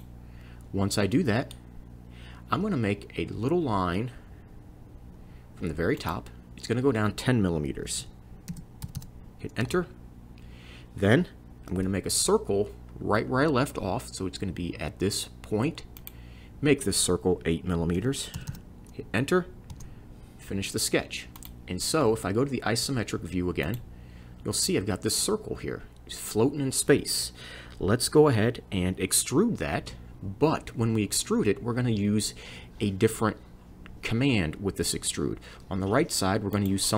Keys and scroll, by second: 7.9 1, 8.5 o, 8.9 m, 9.7 Return, 11.7 c, 18.0 8, 18.4 m, 19.7 Return, 29.8 e.